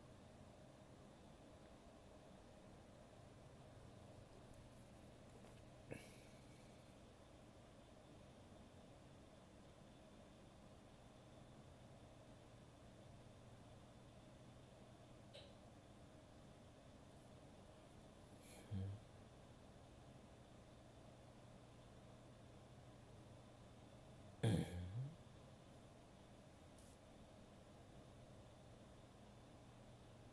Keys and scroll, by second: 0.9 ctrl+z, 15.4 ctrl+z, 17.6 ctrl+z, 19.7 ctrl+z, 23.9 ctrl+z, 27.0 ctrl+z.